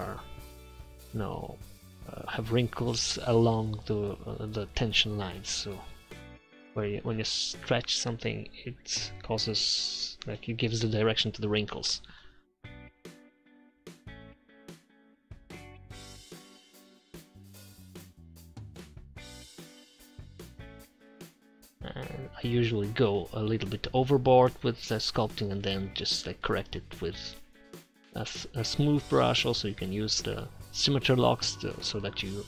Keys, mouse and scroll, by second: 0.4 click, 1.2 click, 1.4 middle click, 2.2 click, 3.3 click, 4.4-6.7 drag, 6.7-9.6 middle drag, 10.1 middle click, 10.4 click, 10.8 4, 12.2-13.8 drag, 13.8 middle click, 14.6-19.1 drag, 19.2-21.8 drag, 21.8-22.8 middle drag, 23.7-24.7 drag, 24.8 click, 25.7 middle click, 26.1 click, 26.8 middle click, 27.0 click, 27.4 middle click, 28.0 middle click, 28.7 click, 29.3 middle click, 30.1 4, 30.3 click, 30.8 middle click, 30.9 click, 31.5 middle click, 32.1 click.